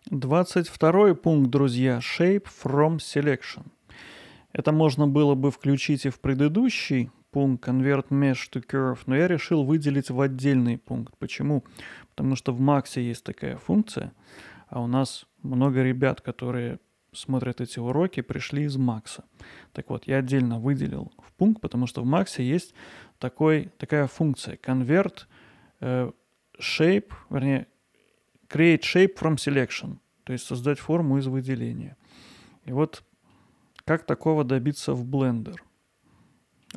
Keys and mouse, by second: 0.4-0.8 middle drag, 2.8-4.4 middle drag, 5.5 middle drag, 8.9-9.6 middle drag, 10.5-10.9 middle drag, 31.6-32.2 middle drag, 32.9-33.4 middle drag, 34.3 click, 34.9-36.7 middle drag.